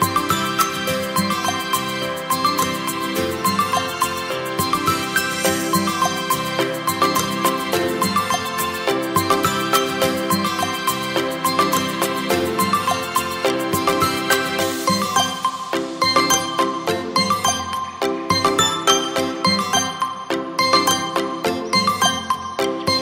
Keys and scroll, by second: 10.6 space, 21.5 Delete.